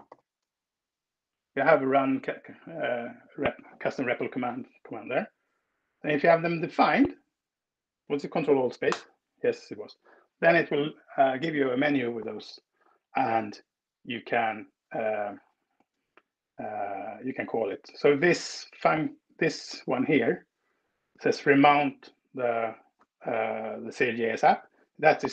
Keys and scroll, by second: 0.0-0.1 typing, 1.6 Down, 5.6 Escape, 8.6 ctrl+alt+space, 18.7 Down, 19.0 Down, 19.2 Down, 19.4 Down.